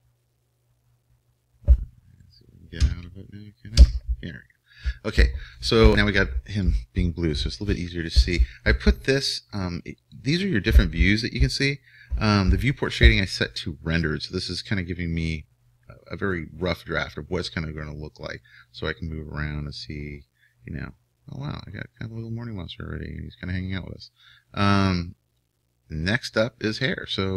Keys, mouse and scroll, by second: 0.9-2.3 drag, 2.3 middle click, 2.7 click, 2.7-4.3 right drag, 3.4 Escape, 4.9 Escape, 7.6-8.6 middle drag, 10.5-12.3 drag, 18.6-20.5 middle drag, 24.8-26.7 middle drag.